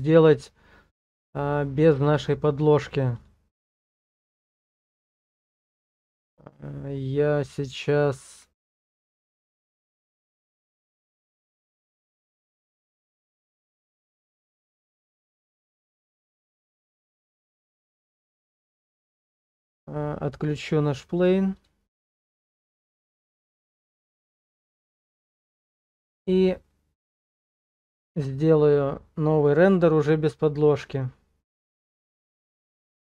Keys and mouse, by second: 12.0-16.5 drag, 16.5 Tab, 21.2 click, 21.5 click, 25.9-28.3 drag.